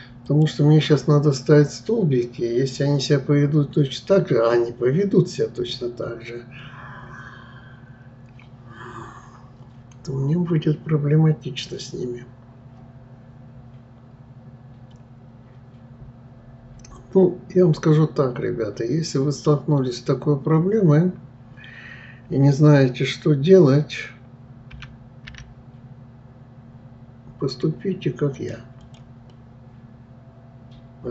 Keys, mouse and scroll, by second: 0.3 click, 28.8 click, 29.3-31.1 middle drag.